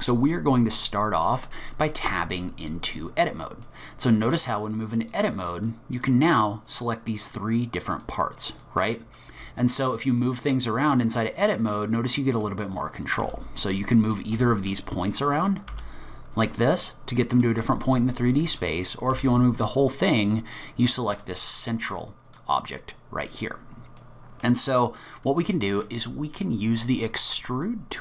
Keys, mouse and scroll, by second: 2.1 Tab, 2.8-3.7 scroll down 3, 3.7 middle click, 4.2-4.8 scroll up 2, 5.0 click, 6.0 click, 6.7 click, 7.2 click, 7.9 click, 8.5 click, 10.1 click, 11.1 click, 11.7 scroll up 3, 12.2-13.2 scroll down 1, 13.2 g, 15.0 click, 15.7 g, 18.3 click, 19.1 g, 23.2-23.6 scroll down 2, 24.0 middle click.